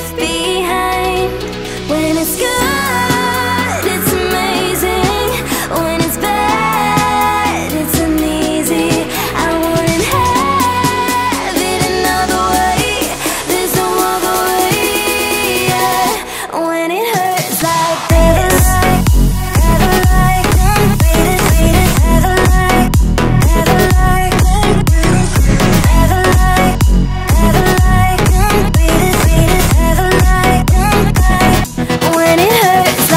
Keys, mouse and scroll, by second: 0.1-2.4 drag, 1.4 BackSpace, 2.5-4.5 middle drag, 4.5 ctrl+s, 4.9 click, 6.3 shift+d, 6.9-8.0 drag, 9.6 BackSpace, 10.2 KP_0, 11.0-12.7 drag, 16.2 click, 16.8 click, 18.1 click, 18.2-19.7 drag, 19.7 Tab, 20.3-21.7 drag, 22.0 middle click, 22.6 alt+shift+click, 22.8 middle click, 23.5 shift+click, 23.7 shift+click, 24.5 shift+click, 24.7 click, 25.1 Tab, 25.3-26.9 middle drag, 27.6-29.2 middle drag, 29.2 scroll down 2, 29.2 scroll up 2, 29.4 middle click, 30.0-30.6 scroll down 2, 30.6 ctrl+s.